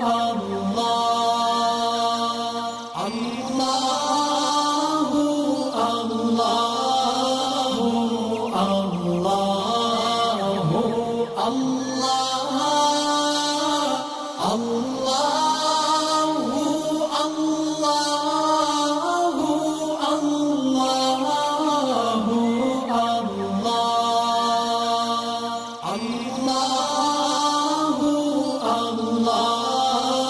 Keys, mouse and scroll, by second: 0.3 click, 0.6 alt+scroll down 2, 0.8 space, 0.8 click, 3.7 ctrl+shift+], 4.7 click, 5.0 alt+scroll down 1, 5.5 alt+scroll up 1, 6.3-8.5 drag, 10.9 alt+scroll down 1, 12.2 click, 13.1 alt+scroll up 1, 14.2-15.0 alt+click, 15.1 right click, 15.9 click, 18.1 alt+scroll down 1, 19.2 click, 19.4 alt+scroll down 1, 19.9 space, 19.9 click, 20.2 alt+scroll up 1, 20.5 click, 21.2 shift+click, 22.3 ctrl+shift+], 23.3 right click, 23.9-28.0 drag.